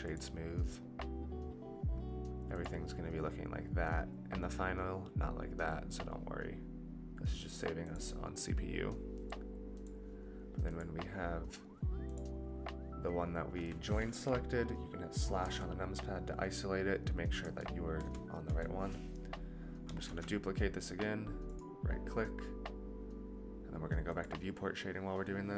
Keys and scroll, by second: 15.4 KP_Divide, 17.4 KP_Divide, 17.9 KP_Divide, 18.5 KP_Divide, 20.2 alt+d.